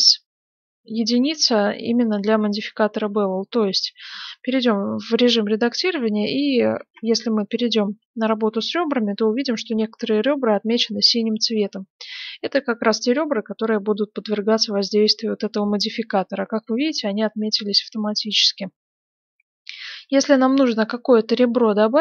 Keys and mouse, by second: 3.6 Tab, 5.2-6.9 drag, 6.8 ctrl+Tab, 6.9 middle click, 7.0 click, 8.1-9.8 drag, 20.2-22.0 middle drag.